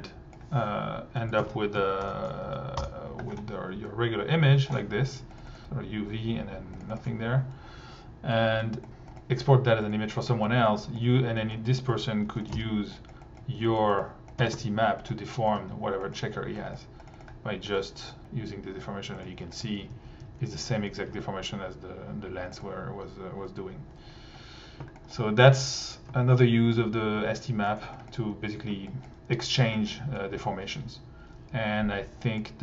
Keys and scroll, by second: 1.4 Tab, 1.8 s, 2.0 h, 2.5 Down, 2.8 Return, 5.5 1, 8.7 1, 9.3 t, 12.3 super+c, 12.5 super+v, 14.4 1, 19.0-21.2 typing.